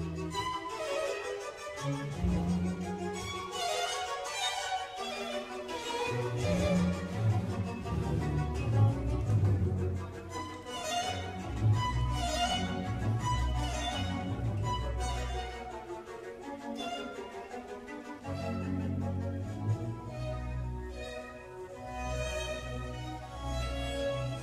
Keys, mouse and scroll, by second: 0.4 shift+click, 2.3 shift+middle click, 3.2 click, 3.5-3.9 scroll up 2, 3.9 click, 4.6 shift+click, 5.8 shift+click, 6.3-6.9 scroll down 1, 6.9-7.9 middle drag, 7.9 g, 12.3 click, 12.6-13.9 middle drag, 13.9-14.4 scroll down 1, 14.4 Tab, 14.8 middle click, 15.3 Tab, 16.5 ctrl+r, 20.6 Tab, 21.0-22.6 middle drag, 22.6 click.